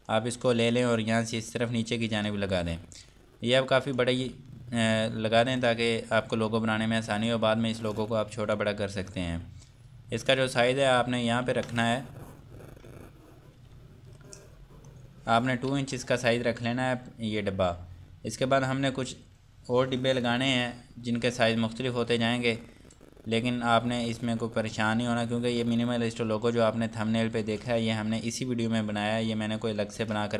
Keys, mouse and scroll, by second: 0.1 click, 4.5 scroll down 1, 5.7 click, 6.2 scroll up 1, 11.2 ctrl+Num_Lock, 11.5 ctrl+4, 13.8 4, 14.2 click, 15.7 KP_2, 16.0 Return, 23.1-24.0 scroll down 1, 26.5 click.